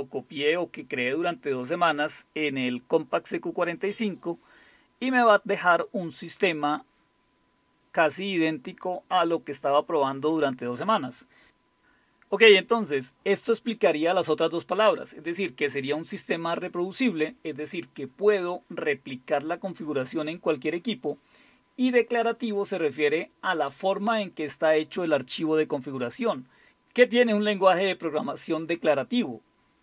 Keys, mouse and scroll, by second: 16.1-17.5 typing, 21.8-23.1 typing.